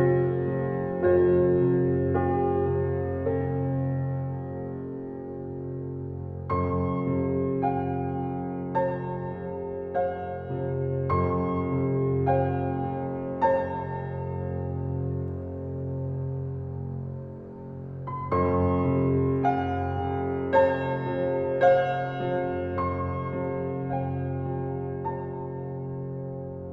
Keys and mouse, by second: 1.6 click, 2.8-3.4 drag, 5.0-7.9 drag, 8.9 click, 9.7 Right, 10.2-10.5 Right, 10.7 Right, 10.9 Right, 11.1 Right, 12.0 click, 12.6-13.5 Left, 13.6 Left, 13.8 Left, 13.9 Left, 14.1 Left, 14.4 Left, 15.0 click, 15.7 click, 17.2 Delete, 18.4 click, 21.1 click, 22.5 ctrl+s, 24.0 click.